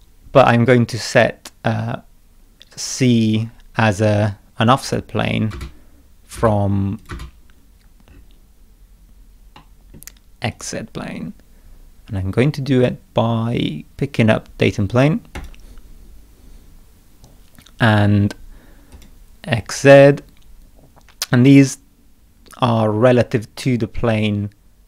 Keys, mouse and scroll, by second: 1.9 scroll up 2, 2.9 scroll down 2, 3.7 middle click, 4.9 click, 5.5 space, 6.4 space, 7.0 click, 7.1 space, 7.8 scroll up 2, 8.1 scroll down 2, 8.9 scroll down 2, 9.6 middle click, 10.5 click, 15.4 click, 18.9 click, 23.6 middle click.